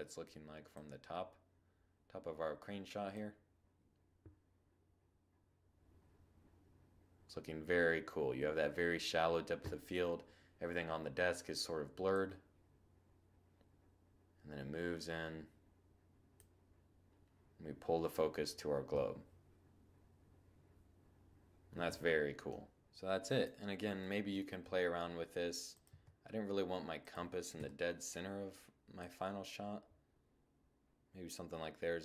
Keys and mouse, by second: 10.8-12.6 drag, 22.3 7, 22.6 click, 23.3 r, 24.5-29.5 drag, 24.5 g, 26.2 0.